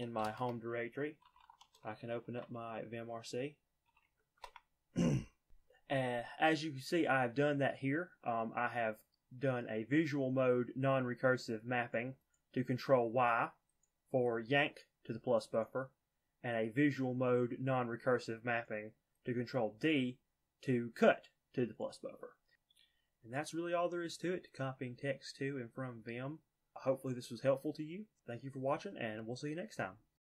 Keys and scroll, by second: 0.0-4.7 typing.